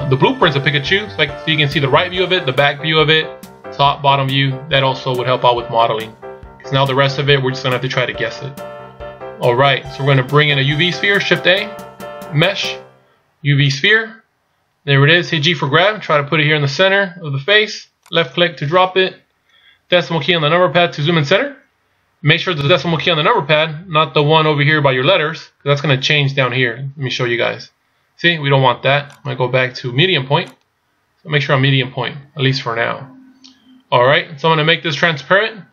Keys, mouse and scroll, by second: 21.0 KP_Decimal, 22.3-23.9 scroll down 1, 24.6 scroll down 1, 27.5 ., 29.2 click, 32.8 scroll down 1, 33.7-34.4 scroll down 1, 34.4 scroll down 1.